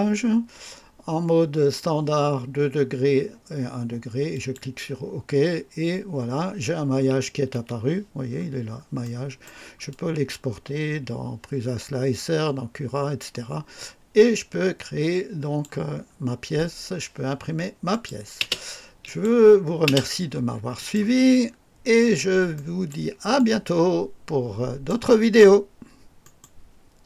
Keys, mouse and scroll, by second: 4.2 click, 7.4 space, 7.4 space, 8.3 scroll up 2, 8.9 right click, 9.8-15.7 drag, 15.9-16.3 scroll down 1, 17.8 click, 18.3 space, 18.9 click, 19.8 space, 20.7 click, 21.4 scroll up 2, 21.7 scroll down 2, 22.4-23.0 right drag, 23.3-25.0 drag, 26.1 right click, 27.0 click.